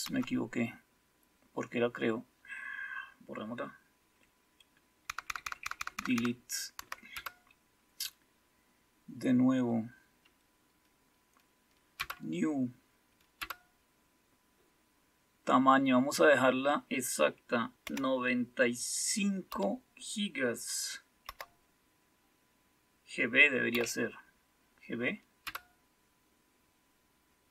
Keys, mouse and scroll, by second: 0.0 Up, 5.0 Left, 5.2 Left, 5.4 Left, 5.6 Left, 5.7 Left, 5.9 Left, 6.1 Left, 6.7 Right, 7.1 Return, 9.1 typing, 11.9 Return, 13.3 typing, 17.8 typing, 19.4 typing, 21.2 typing, 23.7 typing, 25.4 Return.